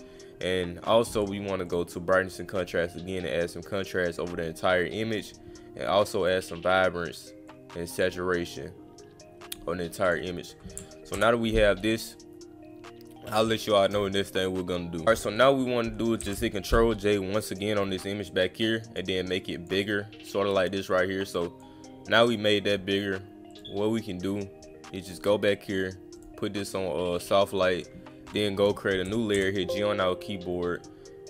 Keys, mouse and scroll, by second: 1.7 click, 2.3 click, 3.4 click, 5.1 click, 6.2 click, 7.5 click, 8.5 click, 10.0 click, 17.5 click, 18.4 click, 19.3 click, 20.5-21.6 drag, 22.3 click, 23.5 click, 26.2 click, 27.2 click, 27.6 click, 28.3 click.